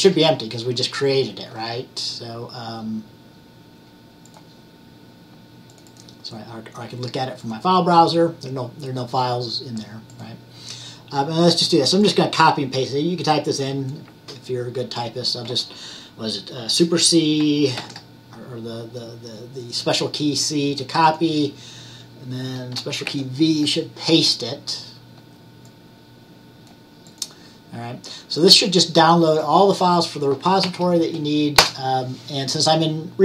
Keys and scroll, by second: 0.0-0.1 typing, 17.9 super+c, 23.2 super+v, 30.7 Right.